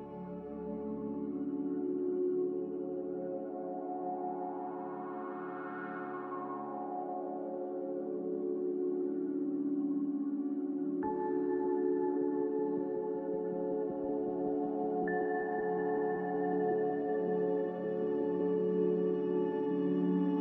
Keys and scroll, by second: 2.7 a.